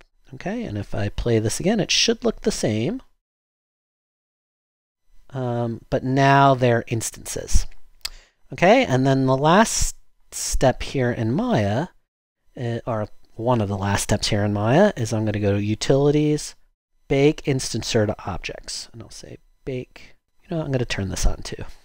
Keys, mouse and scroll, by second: 4.2 0.